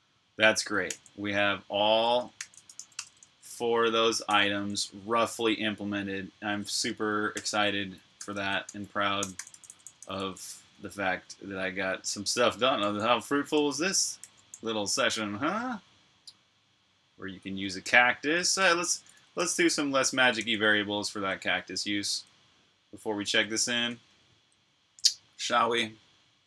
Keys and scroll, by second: 1.8-4.5 typing, 7.2-11.0 typing, 12.7-14.3 typing, 18.4-19.3 typing, 20.2 super+j, 24.0 super+[.